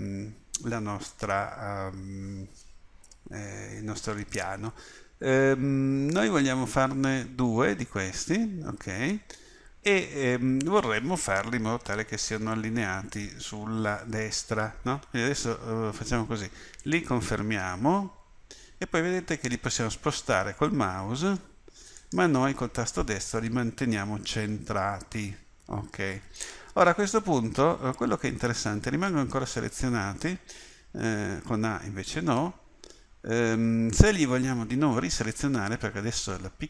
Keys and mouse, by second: 30.9 a, 32.9 a, 33.4 a.